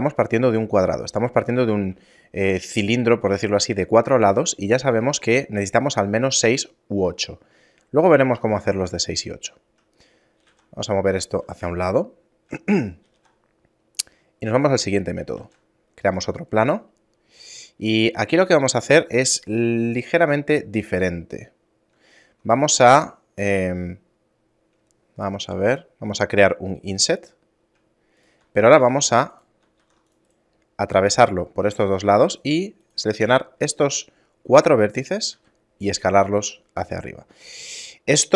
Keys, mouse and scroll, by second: 2.1 shift+middle click, 7.3 shift+middle click, 8.9 middle click, 9.5-10.0 scroll down 2, 10.4 g, 11.8 middle click, 12.7 middle click, 13.1 g, 15.4 shift+a, 16.6 Tab, 25.5 i, 28.7 ctrl+r, 29.8 ctrl+r, 31.8 right click, 32.2 shift+right click, 32.8 shift+right click, 33.2 right click, 35.3 s.